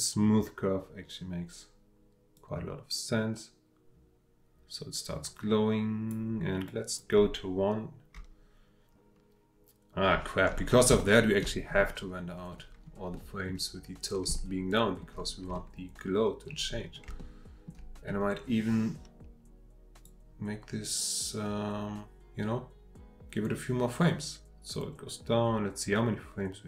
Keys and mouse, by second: 2.4-6.1 drag, 6.7-7.1 drag, 11.0-11.4 shift+middle drag, 11.8-12.5 drag, 13.2 middle click, 14.4-15.0 shift+middle drag, 17.2-17.7 shift+middle drag, 20.0-26.6 drag.